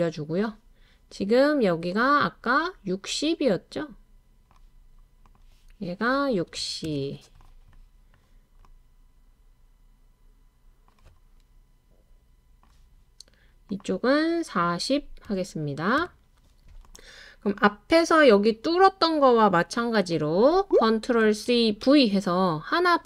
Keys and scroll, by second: 6.3-6.8 typing, 14.6-16.0 typing, 21.5 super+c, 21.8 super+v.